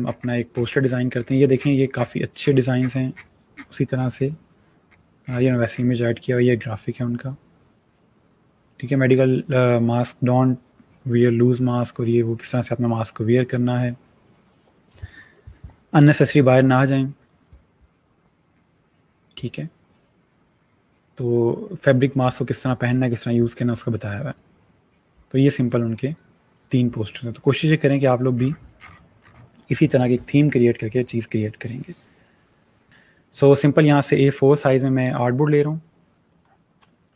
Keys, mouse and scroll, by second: 0.0 scroll, 0.2 scroll up 1, 5.1-5.4 scroll down 1, 6.2 click, 13.6 click, 17.3 click, 24.2 click, 28.3 scroll down 1, 32.9 click, 37.0-37.1 alt+scroll down 2.